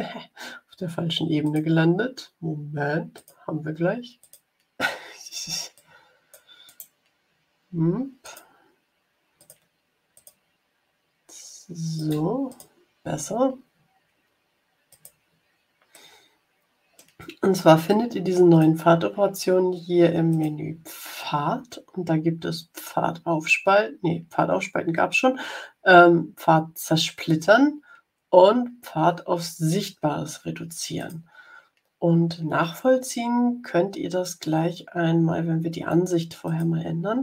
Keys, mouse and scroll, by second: 1.4 click, 3.1 click, 4.1 click, 5.7 click, 6.6 right click, 8.1 click, 9.3 click, 10.0 click, 11.9 click, 12.4 click, 14.8 click, 15.8-17.1 middle drag, 17.8 click, 20.2 click, 30.9 click, 36.4 click.